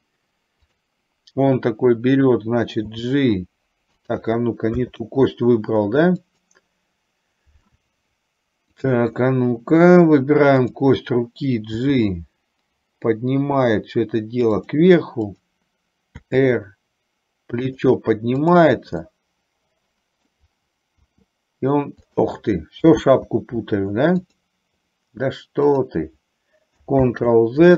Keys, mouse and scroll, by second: 0.8 click, 3.1 g, 5.1 z, 10.7 click, 11.8 g, 15.3 click, 16.4 r, 18.4 click, 19.2-20.3 middle drag, 21.2 r, 23.1 z, 27.3 ctrl+z.